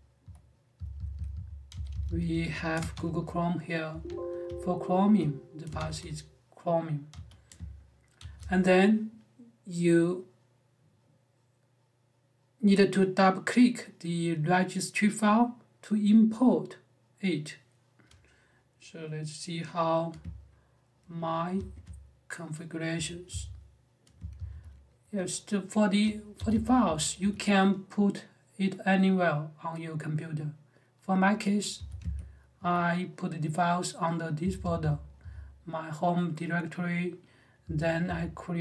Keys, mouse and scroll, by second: 0.0-2.7 typing, 3.7 Escape, 4.2-4.9 j, 5.5 *, 5.9 shift+8, 6.9 n, 7.9 shift+g, 21.3 r, 22.7 space, 23.0 e, 24.1 e, 25.9-27.5 typing, 31.5 f, 32.3 l, 34.2-35.0 typing, 37.4-37.8 typing.